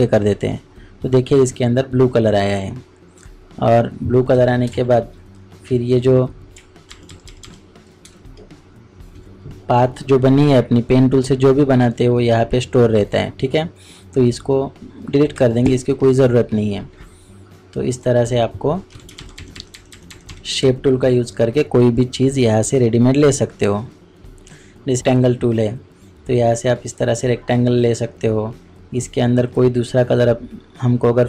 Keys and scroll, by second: 8.0 space.